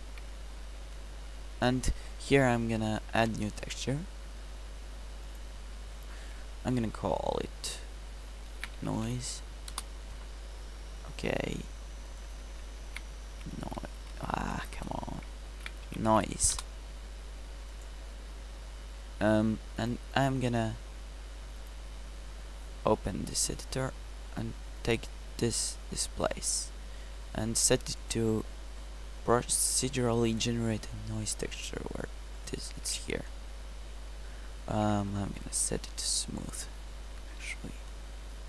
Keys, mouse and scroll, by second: 0.2 Tab, 14.6 BackSpace, 14.9 BackSpace, 29.9 scroll up 1, 35.5 t, 37.4 t.